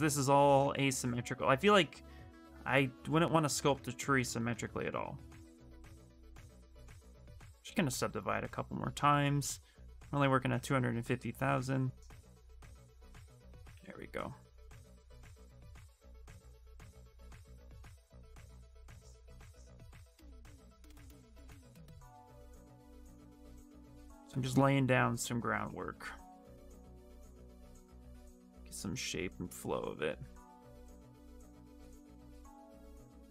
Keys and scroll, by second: 7.2 ctrl+d, 16.1 w, 17.9 q.